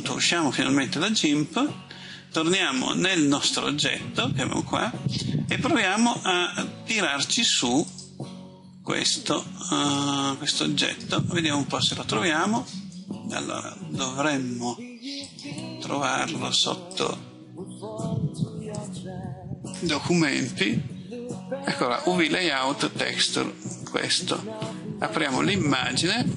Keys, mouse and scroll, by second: 17.9-20.7 drag, 23.6 right click, 25.1 click, 26.2-26.3 scroll down 1.